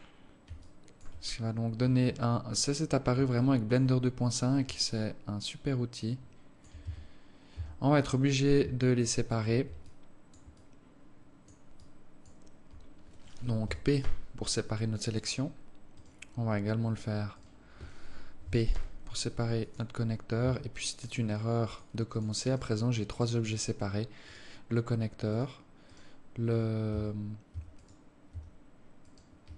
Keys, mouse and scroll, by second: 0.0 scroll down 1, 0.8 alt+click, 1.4-1.8 scroll up 2, 3.5 alt+shift+click, 5.0 alt+click, 7.0 Tab, 7.7 Tab, 10.0 alt+click, 10.7 alt+click, 12.0 alt+click, 14.2 p, 16.1 right click, 17.5 right click, 18.9 p, 20.6 Tab, 21.2 right click, 21.8 right click, 22.3 right click, 22.7 right click, 23.3 right click, 23.7 right click, 24.4 right click, 25.5 right click, 26.0 right click, 27.0 Tab, 27.7 Tab, 28.0 right click, 28.5 Tab, 29.2 right click.